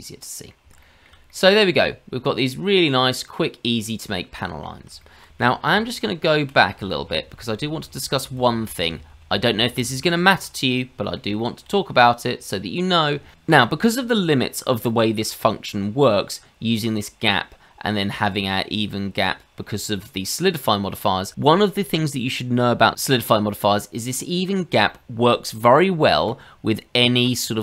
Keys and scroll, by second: 5.7 ctrl+z, 6.2 ctrl+z, 6.7 ctrl+z, 7.0 ctrl+z, 7.2 ctrl+z, 7.4 ctrl+z, 7.6 ctrl+z, 7.8 ctrl+z, 8.3 ctrl+z, 8.5 ctrl+z, 8.7 ctrl+z, 8.9 ctrl+z, 9.1 ctrl+z, 9.4 ctrl+z, 9.6 ctrl+z, 9.8 ctrl+z.